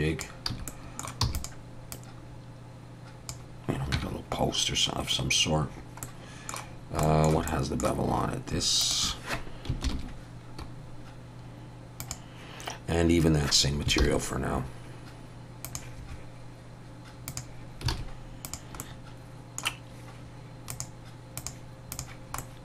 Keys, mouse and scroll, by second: 0.5 a, 0.7 middle click, 1.2 e, 1.9 click, 3.9 Tab, 6.0 middle click, 6.7 scroll down 2, 7.0 shift+middle click, 7.5 middle click, 8.8 shift+click, 9.8 ctrl+l, 14.0 ctrl+l, 17.3 click, 18.0 alt+a, 18.4 click, 18.8 middle click, 20.7 click, 22.4 middle click.